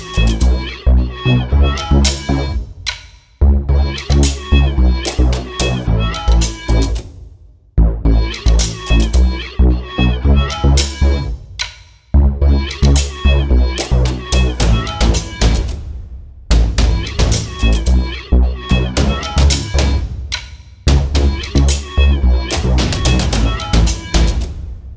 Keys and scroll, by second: 6.1 m, 7.6 h, 9.6 m, 12.2 /, 12.5 5, 12.6 Return, 12.9 space, 17.1 h, 20.4 space, 22.1 m.